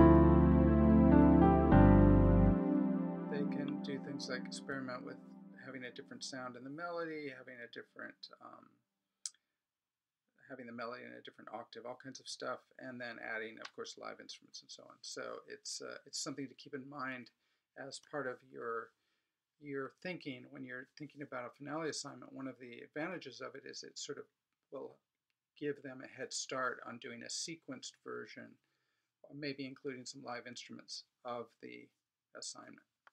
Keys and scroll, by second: 2.3 space.